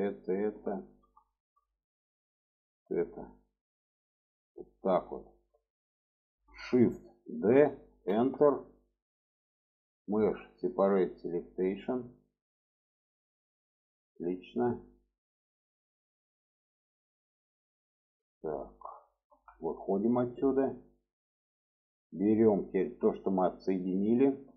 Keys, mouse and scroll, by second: 0.0 click, 0.5 middle click, 1.0 shift+middle click, 2.3 shift+click, 2.7 shift+click, 3.1 shift+click, 3.8 shift+click, 4.4 shift+click, 5.0 alt+middle click, 7.0 shift+d, 9.8-11.0 drag, 11.7 shift+middle click, 12.2 middle click, 13.4 click, 13.9 middle click, 19.1 Tab, 20.6 click, 21.4 drag, 22.2 drag, 22.7-24.4 middle drag.